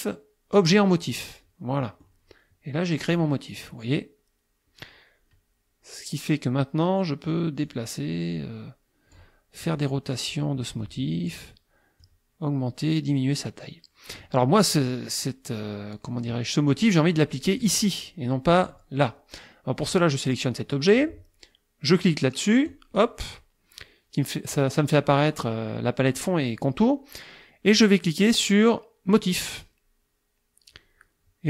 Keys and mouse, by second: 1.1 click, 1.8 middle click, 3.0 click, 7.6-9.4 drag, 10.3-11.5 drag, 12.0-14.4 drag, 17.6 click, 18.6 click, 19.8 click, 22.7 click, 29.4 click.